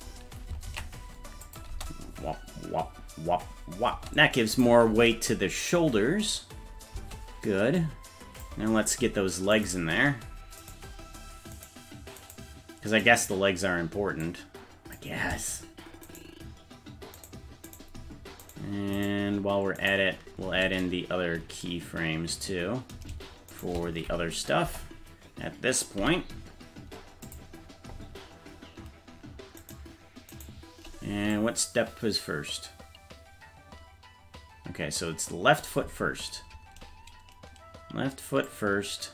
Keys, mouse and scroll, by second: 0.9 ctrl+s, 1.5 click, 1.7 space, 3.9 space, 4.5 click, 4.9 space, 7.0 space, 7.8 click, 9.6 right click, 10.7 right click, 12.3 right click, 13.0-14.2 right drag, 14.2 click, 16.1-17.9 shift+right drag, 19.0 shift+right click, 19.9 shift+right click, 23.6 shift+right click, 24.7 KP_0, 26.0 i, 29.7 right click, 31.3-35.6 drag, 38.5-39.1 drag.